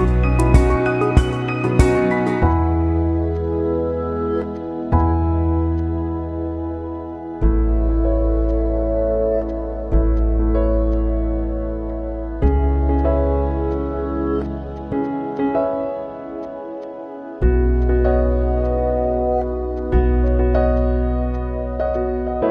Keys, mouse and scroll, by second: 0.4 space, 0.5-12.0 drag, 12.0 space, 12.7-22.5 drag.